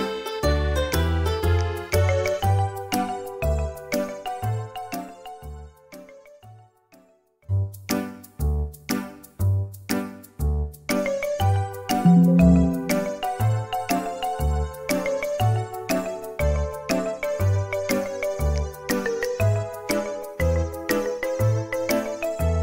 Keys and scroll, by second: 6.1 space, 6.6 Escape, 11.6 space, 12.6 space, 14.9 r, 17.8 space, 17.8 r, 20.7 typing.